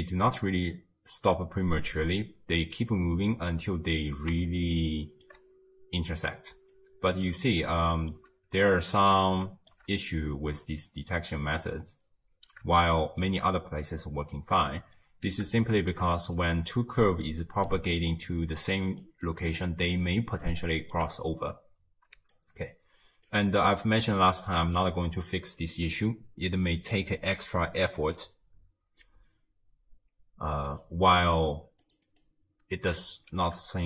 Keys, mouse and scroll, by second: 3.8 space, 4.5-8.8 shift+middle drag, 8.8-9.4 scroll up 1, 9.4 scroll up 1, 9.5-12.5 shift+middle drag, 12.8-15.0 shift+middle drag, 15.0-15.7 scroll down 2, 15.7-16.1 shift+middle drag, 16.1-16.7 scroll down 1, 16.7-20.5 typing, 17.4 click, 17.9 click, 18.6 click, 19.3 click, 20.6-22.2 shift+middle drag, 22.2 d, 22.3 right click, 23.3 d, 23.6-24.2 scroll down 2, 24.2-27.2 shift+middle drag, 30.7 click, 31.9 click, 32.2 click.